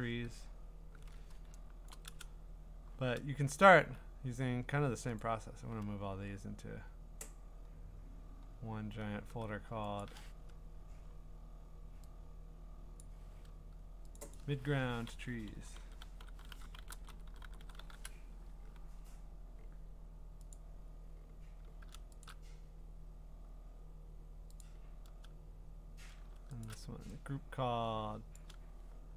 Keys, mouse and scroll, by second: 2.0 click, 5.2 click, 5.5-6.9 scroll, 6.9-8.0 scroll, 8.1 scroll, 10.0 shift+click, 11.0-11.5 scroll, 13.0 click, 14.3 click, 15.3-18.3 typing, 19.4 click, 19.6 click, 20.9 click, 21.9 middle click, 22.2 shift+click, 23.6-24.0 scroll, 24.6 click, 25.7-26.2 scroll, 26.7 shift+click, 28.3 click.